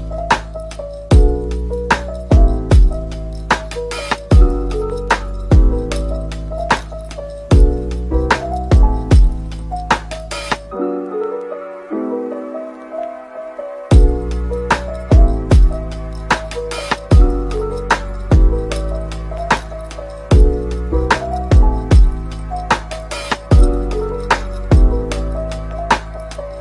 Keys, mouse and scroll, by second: 0.8-2.7 typing, 4.7-6.3 typing, 12.4 typing, 13.7-14.6 typing, 15.9-16.4 typing, 17.9 right click, 18.2 Tab, 18.6 typing, 25.2 s.